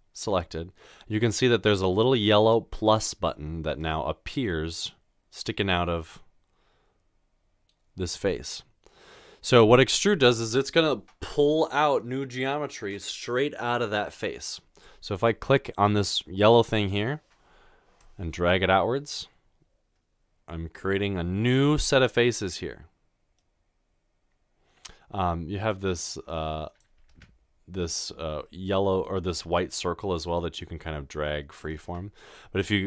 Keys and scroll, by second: 27.1 ctrl+z, 31.9 ctrl+z.